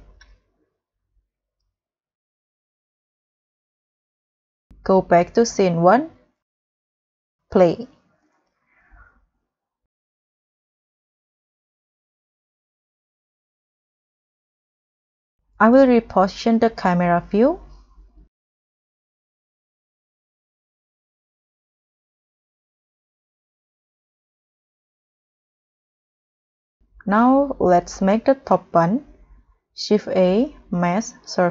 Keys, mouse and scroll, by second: 2.4-3.0 scroll down 7, 3.2-3.9 scroll up 6, 6.1 scroll up 1, 6.2 scroll down 2, 6.7 scroll up 1, 11.8 scroll down 1, 12.0 middle click, 13.8 KP_0, 14.9 scroll down 4, 15.4 scroll up 1, 17.6 g, 18.0 middle click, 21.7 middle click, 21.7 g, 27.4 middle click, 27.9 scroll down 4, 28.3 scroll up 3, 28.6 middle click, 29.6 ctrl+a, 30.5 shift+a.